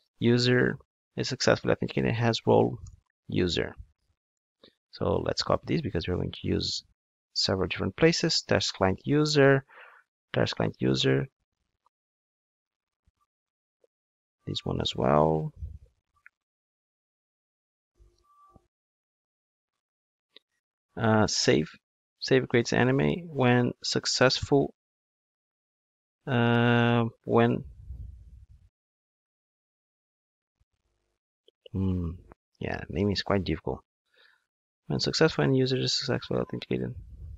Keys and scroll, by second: 7.0 super+c, 12.9 super+v, 13.5 super+v, 13.6 super+z, 15.1 super+v, 18.4 super+1, 24.6 super+v.